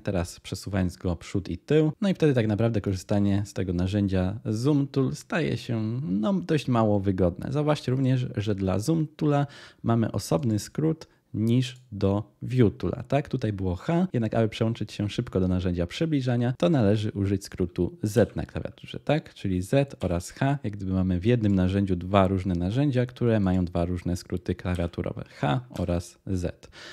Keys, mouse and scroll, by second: 0.5 scroll, 18.1 z.